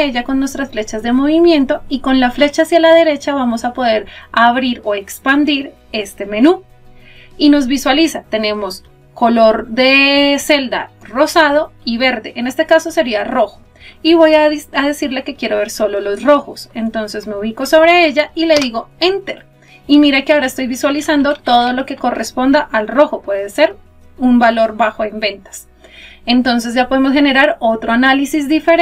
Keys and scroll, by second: 18.6 Return.